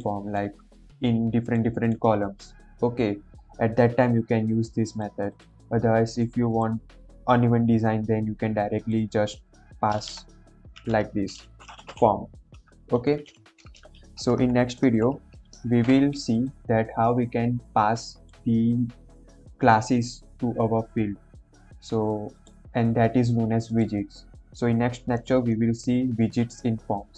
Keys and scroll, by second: 10.0 Return, 10.7-12.3 typing, 13.1 Right, 13.2 Right, 14.3 shift+Up, 15.2 BackSpace, 15.5 ctrl+s.